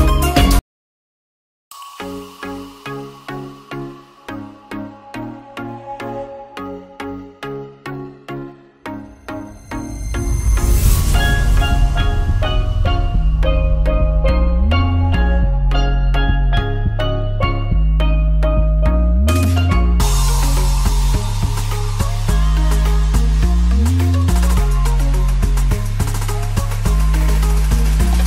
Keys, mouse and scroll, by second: 0.1 shift+a, 0.2 shift+click, 0.5 alt+z, 1.2-1.9 shift+drag, 1.9-2.9 middle drag, 4.0 ctrl+drag, 5.4-5.7 ctrl+drag, 7.3 ctrl+l, 9.6 click, 10.0-10.3 middle drag, 10.7 alt+middle click, 11.2 ctrl+s, 11.6 drag, 11.9 shift+drag, 12.2-12.5 alt+middle drag, 13.0-13.4 alt+middle drag, 13.6 shift+middle drag, 14.6-15.3 alt+middle drag, 15.3 click, 15.3 right click, 15.8 shift+click, 16.6 ctrl+l, 17.7 a, 18.6 ctrl+s, 20.7 click, 21.3 click, 22.4 shift+a, 22.5 middle click, 22.9-23.3 alt+middle drag, 23.8 click, 24.2-24.5 shift+drag, 25.4 ctrl+l, 26.4 click, 26.9 ctrl+s, 27.0-27.3 alt+drag, 27.4 shift+a, 27.6 alt+shift+middle click, 27.8 middle drag.